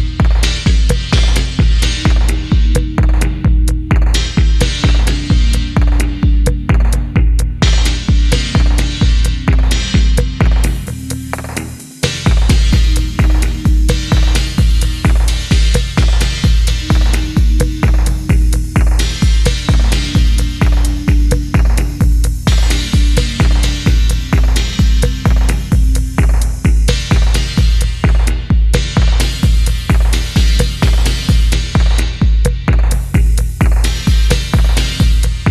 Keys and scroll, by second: 0.6 typing, 2.1-3.6 typing, 4.7 typing, 6.4-7.0 typing, 9.6 typing, 11.2 typing, 12.7 typing, 14.3 typing, 16.0 typing, 17.1 1, 18.1 3, 19.7 g, 19.8 Down, 19.9 Down, 20.0 Down, 20.1 Return, 25.1 ctrl+1, 28.6 ctrl+c, 28.6 ctrl+c, 29.1 e, 30.9 ctrl+v, 31.2 Return, 32.5-33.1 typing, 34.8-35.3 typing.